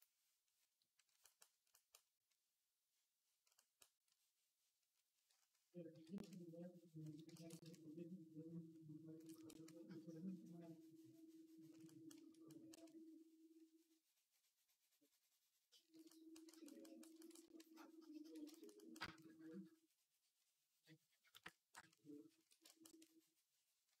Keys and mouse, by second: 5.7 d, 17.4-24.0 shift+drag.